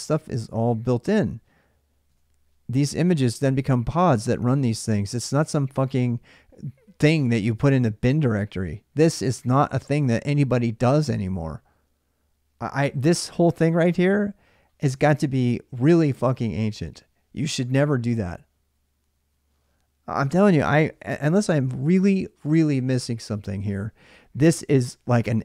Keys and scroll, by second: 1.9 alt+Tab, 5.2 alt+Tab.